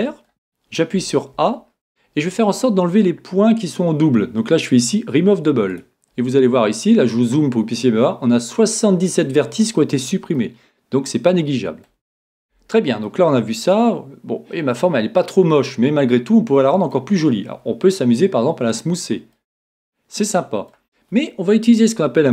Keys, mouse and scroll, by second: 0.9 a, 1.5 a, 5.7 click, 10.4-12.4 middle drag, 12.2-13.0 scroll up 1, 13.0-14.9 middle drag, 18.7 click, 20.4 middle click.